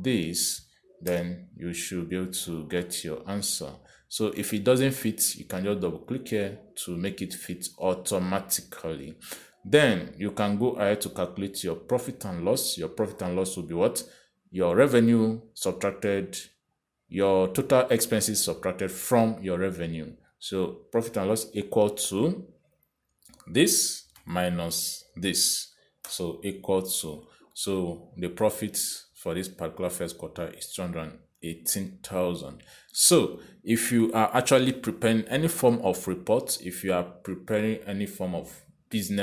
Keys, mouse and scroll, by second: 1.6 click, 2.4 Return, 3.8 click, 21.6 click, 22.6 =, 24.5 click, 25.4 -, 26.4 click, 27.3 Return, 28.8 click, 34.0 click.